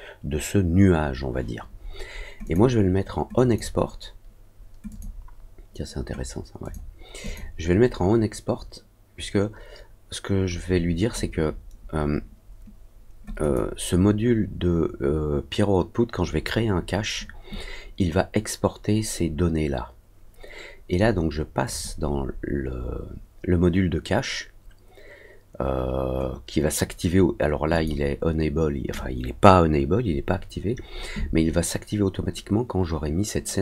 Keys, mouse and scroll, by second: 2.4 click, 3.3 click, 4.8 click, 6.6 click, 7.2 click, 13.3 click, 21.6 click, 27.7 click.